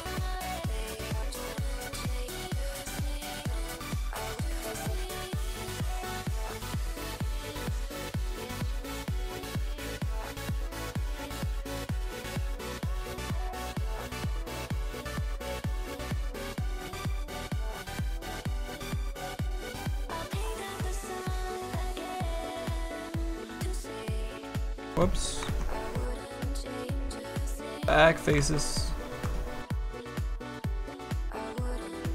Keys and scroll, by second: 24.3 ctrl+z, 25.4 ctrl+z.